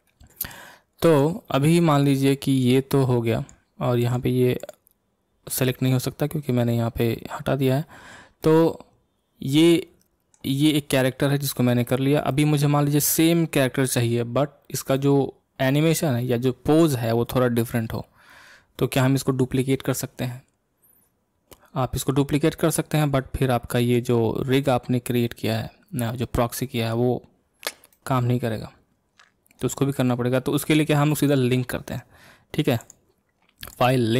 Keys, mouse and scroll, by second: 1.0 click, 2.6 click, 4.0 click, 4.6 click, 8.4-11.4 middle drag, 12.2 scroll up 1, 12.3-18.0 middle drag, 23.9 click, 27.9-30.9 middle drag, 31.2 click, 32.8-34.1 drag.